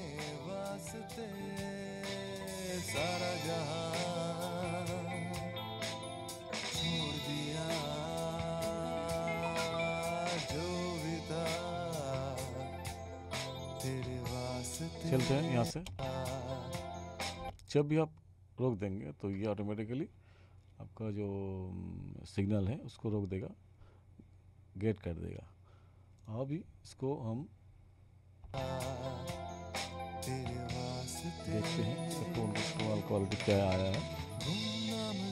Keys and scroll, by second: 15.7 space, 17.5 space, 28.5 space.